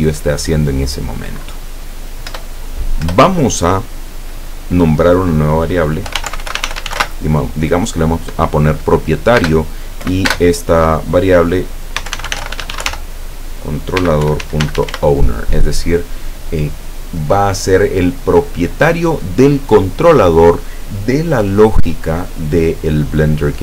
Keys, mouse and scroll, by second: 2.3 Return, 3.1 Return, 6.1-7.0 typing, 9.4 space, 10.1 =, 10.4 space, 12.0-12.9 typing, 14.0-15.0 typing.